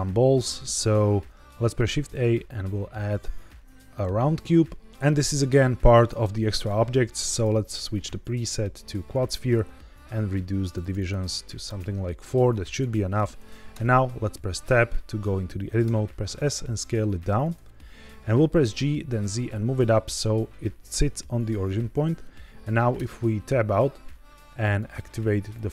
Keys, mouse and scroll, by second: 1.9 shift+a, 7.2-9.3 drag, 10.5 click, 10.7 click, 10.9 click, 11.6 click, 12.6-13.1 right drag, 13.6 Tab, 15.7 s, 17.3 click, 18.5 g, 18.7 z, 19.9 click, 22.9 Tab, 24.5-25.7 drag.